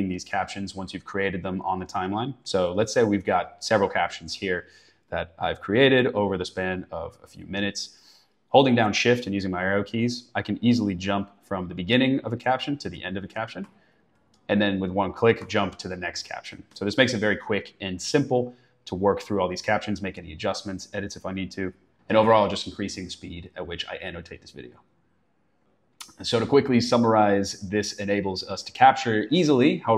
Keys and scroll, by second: 0.5 shift+Right, 2.2 shift+Left, 12.7 shift+Right, 14.1 shift+Left, 14.5 shift+Right, 14.8 shift+Left, 15.2 shift+Right.